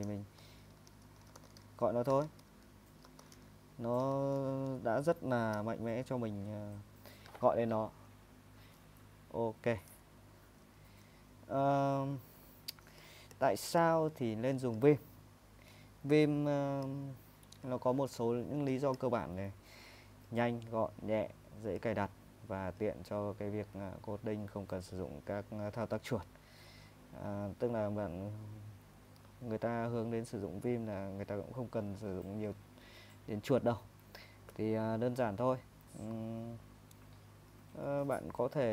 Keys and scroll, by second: 0.0-3.7 typing, 4.0 Tab, 5.5 ;, 9.6 ⟲, 10.5 super+Tab, 38.2 super+Tab.